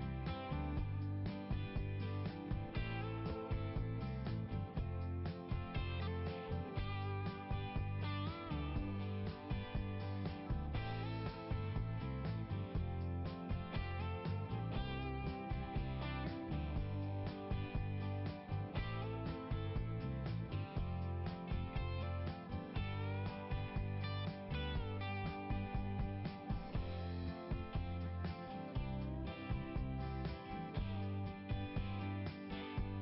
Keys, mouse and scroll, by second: 1.4 right click, 1.5 right click, 2.5 right click, 3.7-4.1 scroll up 1, 4.1 scroll down 1, 5.8-7.4 typing, 8.6 click, 8.7 click, 9.6 click, 12.7 click, 14.1 click, 15.3-17.1 typing, 18.3 scroll up 1, 20.5 click, 21.9-22.3 scroll down 1, 31.5 click.